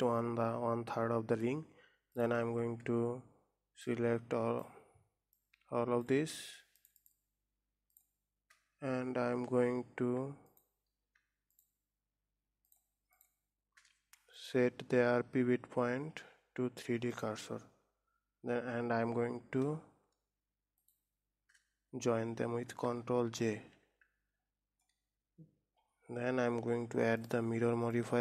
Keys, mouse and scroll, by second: 2.6 click, 4.4 click, 5.8 click, 7.2 shift+click, 8.4 shift+click, 10.9 shift+click, 11.9 shift+click, 13.1 shift+click, 13.7 shift+click, 14.8-17.9 right drag, 21.3 shift+click, 23.8 ctrl+j, 27.6 click.